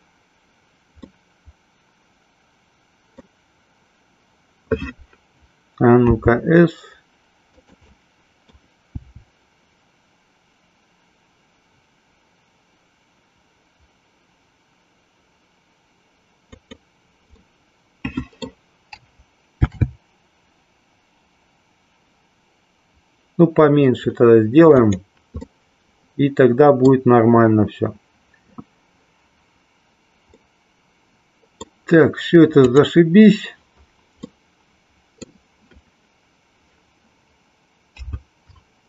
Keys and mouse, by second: 0.9-3.2 middle drag, 7.5 click, 7.8 middle click, 16.5 click, 17.4-18.5 middle drag, 19.5 ctrl+b, 24.8 click, 25.4-26.9 middle drag, 30.3-31.5 middle drag, 32.7-33.7 drag, 34.2-35.3 middle drag.